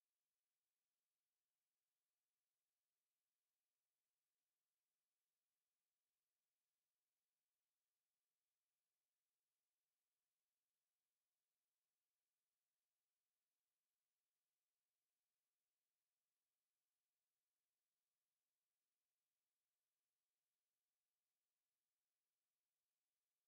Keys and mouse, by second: 1.6 alt+click, 2.7 click, 4.0 alt+click, 10.5 alt+click, 13.6 ctrl+z, 13.9 ctrl+z, 14.9 ctrl+z, 15.1 ctrl+z.